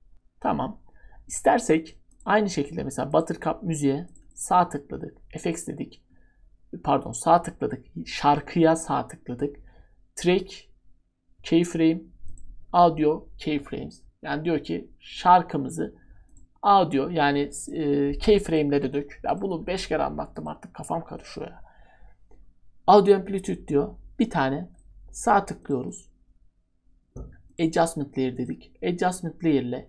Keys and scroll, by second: 19.7 Delete, 20.9 Delete.